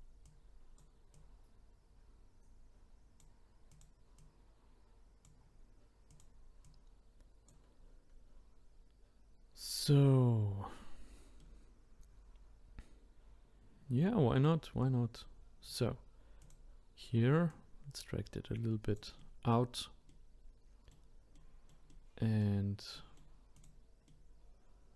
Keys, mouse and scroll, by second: 0.2 click, 1.1 click, 3.7 click, 4.2 click, 6.1 click, 10.0-10.4 scroll down 1, 11.4-16.4 middle drag, 16.4 click, 17.5 click, 19.2-23.5 middle drag, 23.5 click, 24.1-24.9 middle drag.